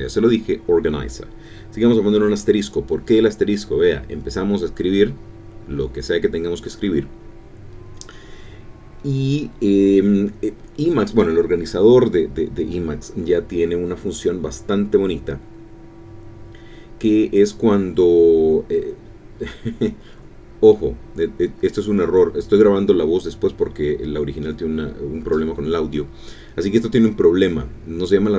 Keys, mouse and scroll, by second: 2.4-4.4 typing, 11.2-13.8 typing, 15.6-21.7 typing, 22.2 Return, 23.6 BackSpace, 27.0 alt+Return.